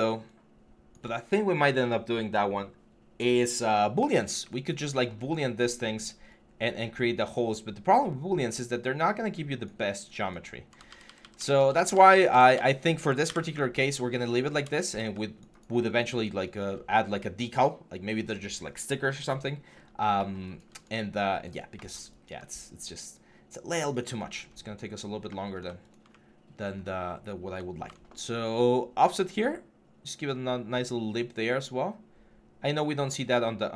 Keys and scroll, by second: 10.7 ctrl+z, 13.1 Delete, 14.5 Delete, 27.6 ctrl+e.